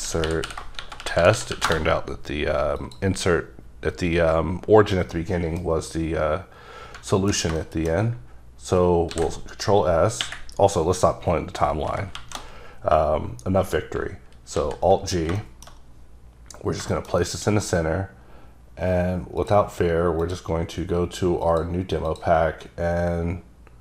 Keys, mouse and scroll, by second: 0.0-1.8 typing, 2.9 click, 5.1 middle click, 9.2 ctrl+s, 11.9 Up, 12.3 Left, 14.7 g, 15.5 shift+middle click, 15.9-16.7 scroll up 2, 16.7-17.1 scroll down 1, 17.1 middle click, 17.4 double middle click, 19.5 click, 20.4 click, 21.9 click, 22.2 click.